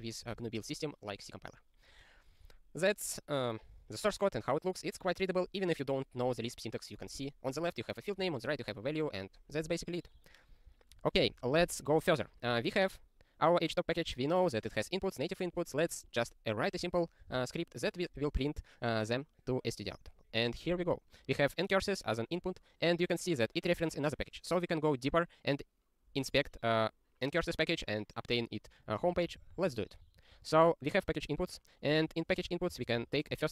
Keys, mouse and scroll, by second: 2.5 super+o, 10.5 click, 11.0 ctrl+p, 11.2 ctrl+a, 11.6 ctrl+alt+@, 12.0 ctrl+g, 14.5 click, 15.9 click, 17.3 ctrl+e, 28.8 click, 29.0 ctrl+space, 29.3 alt+w, 29.4 ctrl+n, 29.5 ctrl+n, 29.7 ctrl+n, 29.8 ctrl+y, 30.1 ctrl+p, 31.4 ctrl+k, 31.8-32.9 typing, 33.0 ctrl+e.